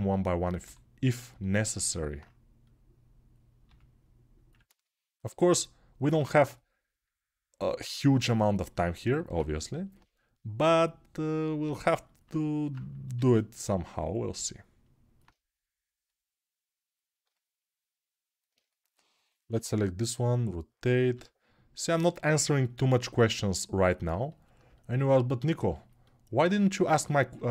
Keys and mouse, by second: 1.0-15.8 alt+middle drag, 15.8-17.0 drag, 22.3-27.5 alt+middle drag.